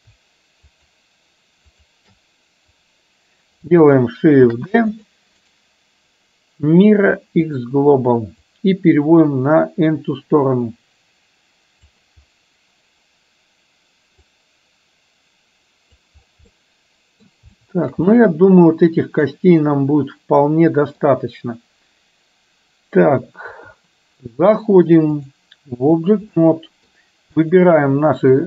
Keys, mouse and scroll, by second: 0.7 shift+click, 1.8 shift+click, 4.6 shift+d, 5.5-7.7 right drag, 8.6-12.0 drag, 14.3-16.1 drag, 16.6 middle click, 17.6 shift+middle click, 18.2-21.1 middle drag, 23.5 KP_1, 25.2-26.2 drag, 26.3-27.0 middle drag, 27.5 click.